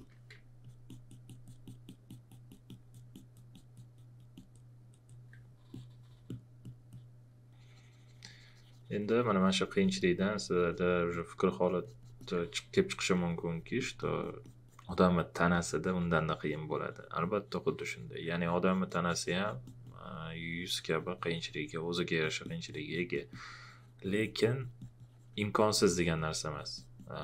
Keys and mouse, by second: 0.0-0.1 typing, 0.6 alt+click.